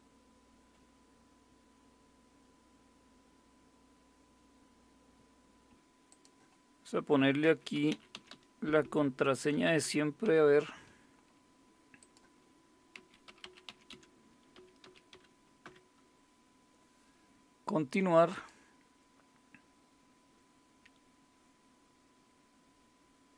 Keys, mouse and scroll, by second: 0.8 F10, 5.7 Down, 6.1 click, 7.2-10.7 typing, 12.0 click, 12.7-16.1 typing, 18.3 click.